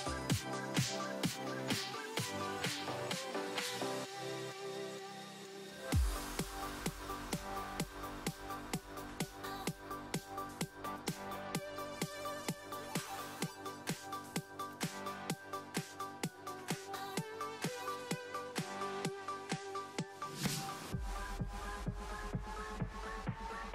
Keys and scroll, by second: 0.4 s, 5.7 s, 13.4 s, 17.1 s.